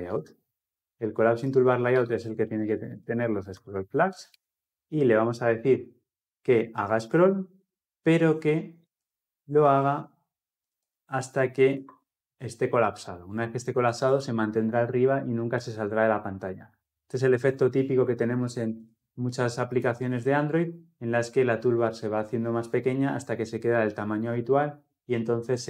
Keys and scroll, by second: 4.0 Return, 11.5 Return, 18.4 ctrl+alt+l, 20.7 ctrl+alt+o.